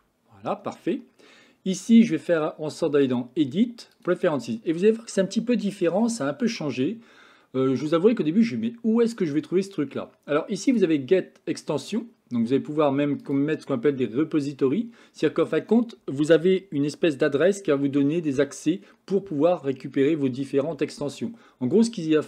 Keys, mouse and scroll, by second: 0.0 n, 2.9-4.2 drag.